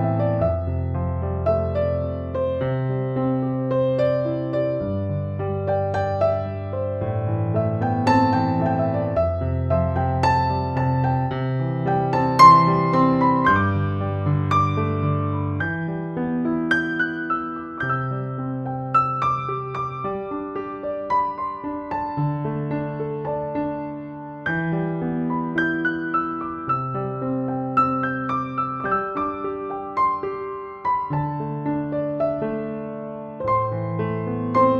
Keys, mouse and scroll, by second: 0.0-34.7 typing, 0.4 ctrl+=, 1.0 ctrl+=, 2.8 click, 6.5 click, 9.5 ctrl+j, 10.7 ctrl+], 11.7 alt+t, 12.6 click, 18.7 click, 24.4 ctrl+alt+g, 25.8 right click, 26.9-29.4 drag, 34.3 click.